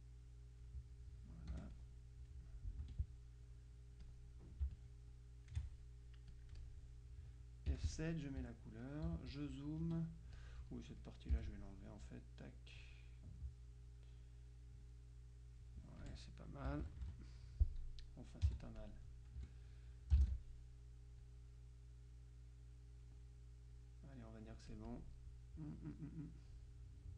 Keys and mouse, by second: 1.6 F1, 1.8-2.8 drag, 2.9 F2, 4.1-5.1 drag, 6.4 click, 7.8 F7, 8.0 click, 8.6 F1, 9.2 z, 9.4 click, 10.1 F2, 10.4-11.9 drag, 11.4 Delete, 12.1-13.4 drag, 15.0-16.7 drag, 16.2 F1, 16.8 KP_Subtract, 18.6 z, 18.8 click, 19.5 F2, 21.3-23.6 drag, 23.8-25.6 drag, 26.6-27.1 drag.